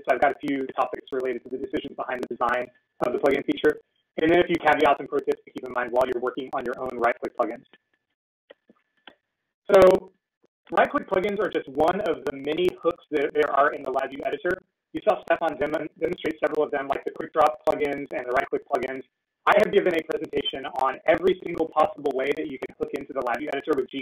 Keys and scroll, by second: 11.3 Return, 11.3 typing.